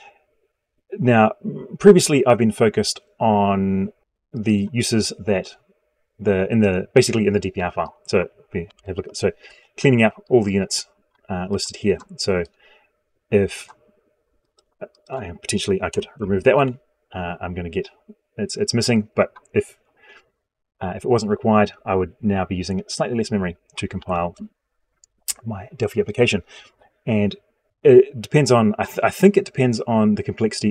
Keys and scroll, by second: 8.3 ctrl+v, 23.7 ctrl+z.